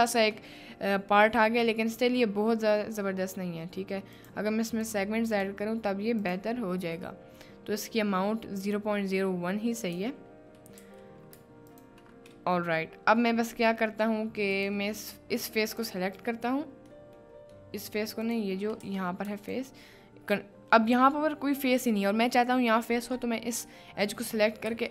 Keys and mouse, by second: 4.2 click, 4.8 click, 5.2 click, 7.2 middle click, 9.4 middle click, 10.1 Tab, 10.8 3, 12.3 middle click, 17.1 middle click, 17.7 middle click, 19.4 alt+click.